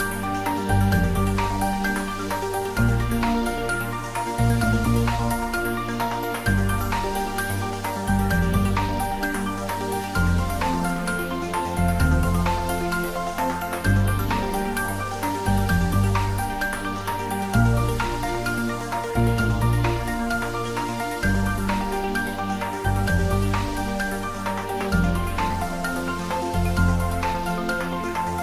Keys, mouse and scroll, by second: 1.9 click, 10.8 click, 12.5-14.8 scroll up 1, 14.8 click, 15.8-17.6 scroll up 1, 17.6-18.2 scroll down 1, 26.8-28.3 scroll down 1.